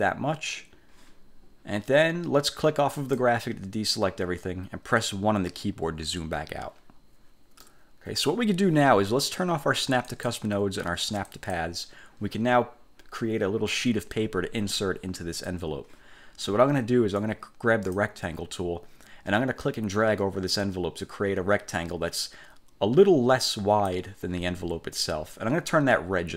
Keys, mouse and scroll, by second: 3.1 click, 6.1 1, 7.7-8.5 drag, 10.2 click, 11.4 click, 17.3 click, 19.8-24.3 drag.